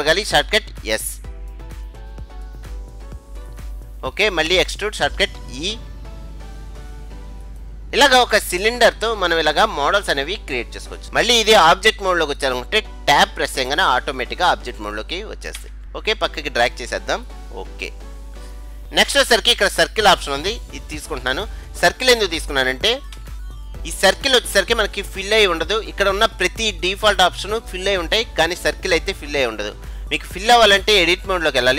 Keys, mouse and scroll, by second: 1.1 s, 5.8 e, 7.9-9.8 middle drag, 15.6 Tab, 15.9 middle click, 17.3-18.8 drag, 20.9-22.6 drag, 23.2 KP_Decimal, 23.8 middle click, 23.8-24.4 scroll up 1.